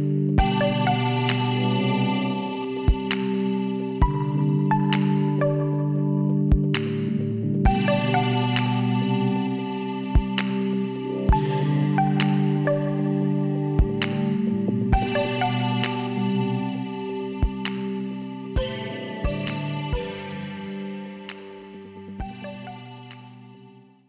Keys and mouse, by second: 0.8 ctrl+n, 1.8 a, 5.5 middle click, 5.6-13.5 drag, 12.5 w, 17.2-18.3 middle drag, 18.5 a, 20.9 click, 21.9 click, 22.0 click, 22.6 click, 23.3 middle click, 23.6 click, 23.7 middle click, 23.9 KP_7, 24.0 click.